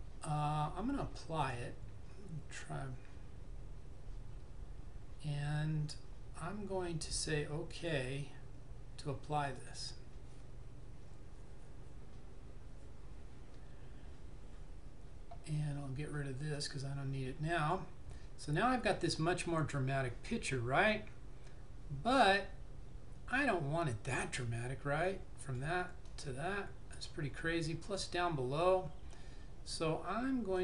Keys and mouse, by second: 1.5 click, 9.6 click, 16.7 click, 25.5 click.